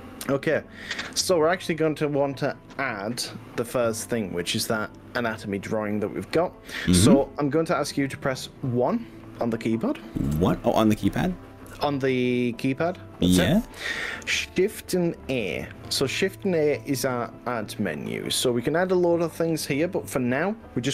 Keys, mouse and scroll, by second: 8.3 middle click, 10.3 1, 11.7 KP_1, 16.9 shift+a.